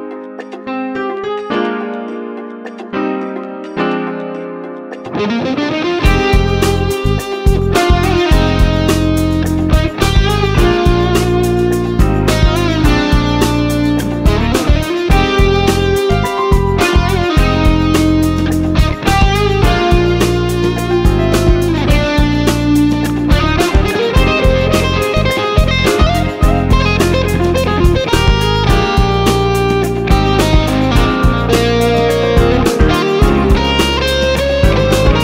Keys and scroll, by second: 6.7 ctrl+j, 14.6 ctrl+j.